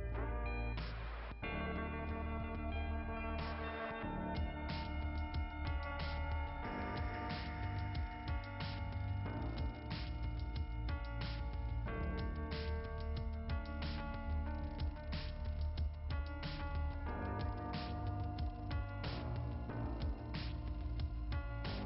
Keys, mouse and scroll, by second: 1.0-2.2 typing, 3.7 typing, 5.0 click, 6.3 click, 9.4 click, 10.5 click, 12.5 click, 13.5 click, 13.9 click, 19.1 click, 20.2 click.